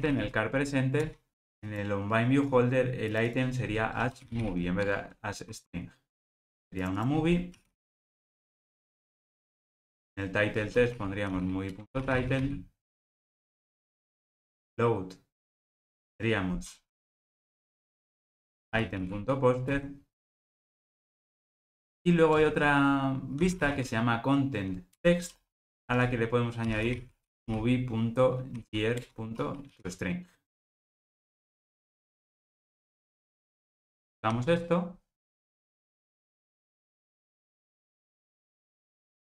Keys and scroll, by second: 4.9 Tab, 11.8 Return, 19.7 Return, 24.9 Return, 32.0 alt+super+l, 34.3 ctrl+r.